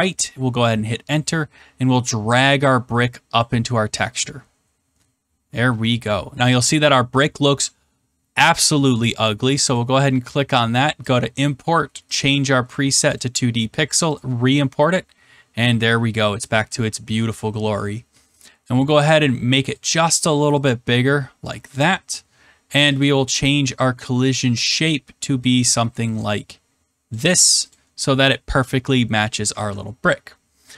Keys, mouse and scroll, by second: 3.3 click, 4.8 scroll, 5.7 scroll, 9.7 click, 11.1 click, 12.1 click, 13.1 click, 16.5 click, 19.6 click, 21.4 click, 22.9 click, 25.3 click, 27.1 click, 27.7 click, 29.5 ctrl+s.